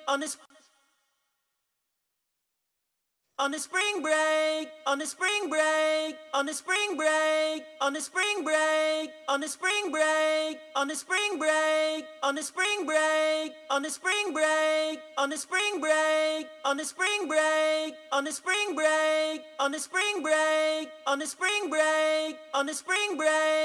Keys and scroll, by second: 16.4-17.1 typing, 22.6-23.6 typing.